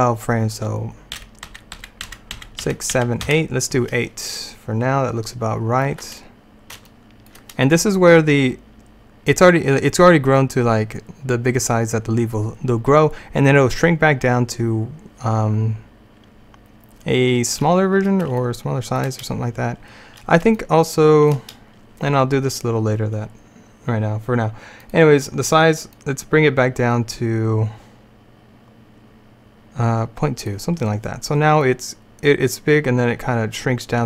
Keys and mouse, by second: 1.3 Right, 1.6 Right, 1.9 Right, 2.1 Right, 2.4 Right, 2.7 Right, 3.0 Right, 3.3 Right, 18.5-19.6 middle drag, 24.9-28.4 drag, 31.7-33.7 drag.